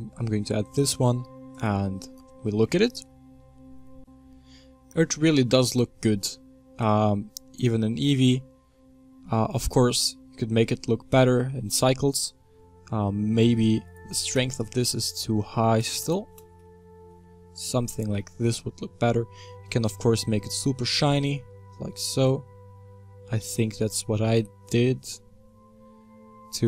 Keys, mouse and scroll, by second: 4.3-5.6 scroll down 2, 5.6 click, 6.2-7.4 middle drag, 7.4 scroll up 3, 7.7-11.4 middle drag, 11.4-12.5 scroll down 1, 13.1-16.3 scroll down 1, 16.3-17.1 drag, 17.1 middle drag, 17.5-18.5 middle drag, 18.5-19.2 middle drag, 20.9-23.8 drag, 25.2-26.6 middle drag.